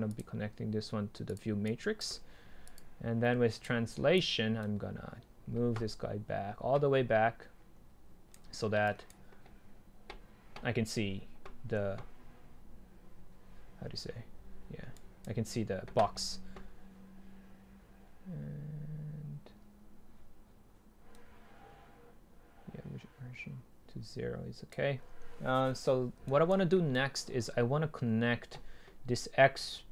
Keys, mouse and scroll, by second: 1.5-4.7 drag, 4.7-5.7 right drag, 15.0-17.3 scroll up 2, 17.3 scroll up 1, 21.2-21.9 scroll down 2.